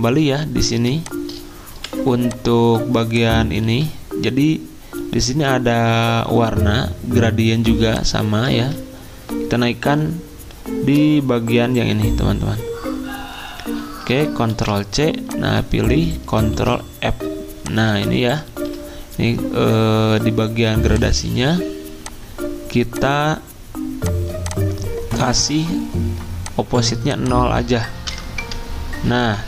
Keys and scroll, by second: 1.7 v, 3.6 ctrl+z, 8.5 ctrl+z, 14.5 ctrl+c, 16.3 ctrl+f, 18.4 ctrl+z, 28.1 0, 28.4 Return.